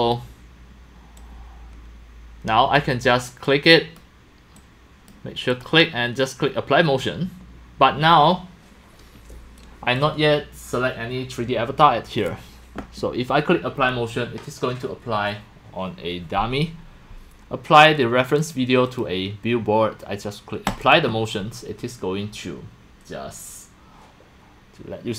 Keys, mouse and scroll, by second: 1.2-2.7 drag, 3.4 click, 4.6-5.0 drag, 5.6 click, 9.6-10.0 drag, 18.4 click, 18.9 click.